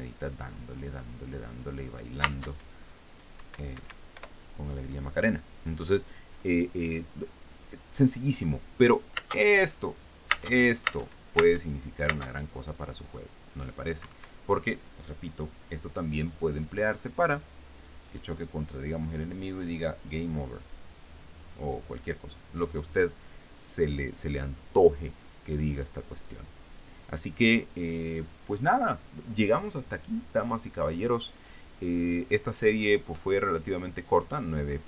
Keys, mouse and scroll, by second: 3.5 space, 4.4 Escape, 4.8 p, 10.4 space, 12.7 space, 14.6 Escape.